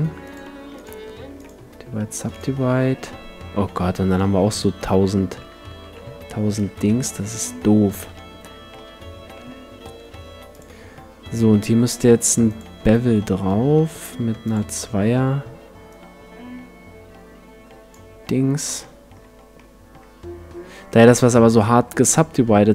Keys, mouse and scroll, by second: 0.6 w, 1.3 w, 2.2 w, 2.9-5.4 middle drag, 5.9 ctrl+z, 6.7 a, 8.1 Tab, 8.7 middle click, 9.3 Tab, 10.5-12.4 drag, 14.4-17.7 drag, 18.8 middle click, 19.3 Tab, 20.9-22.7 drag.